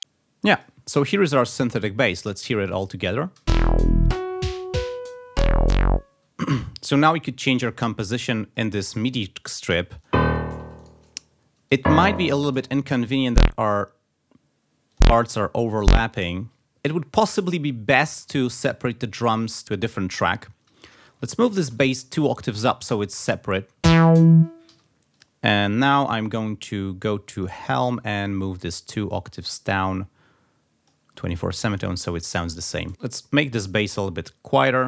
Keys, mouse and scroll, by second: 0.5 click, 2.3 click, 3.4 space, 7.8 click, 9.7 d, 10.0 click, 10.8 shift+right click, 11.7 click, 12.7 shift+right click, 13.3 shift+click, 14.9 ctrl+scroll up 1, 15.8 ctrl+scroll up 1, 18.2 ctrl+Up, 19.2 ctrl+Up, 20.7 alt+Down, 21.5 alt+Up, 23.1 click, 23.8 space, 24.7 g, 25.2 click, 25.8 click, 27.4 click, 28.7-31.3 drag, 31.7 click, 32.3 click, 32.9-34.1 drag, 32.9 space.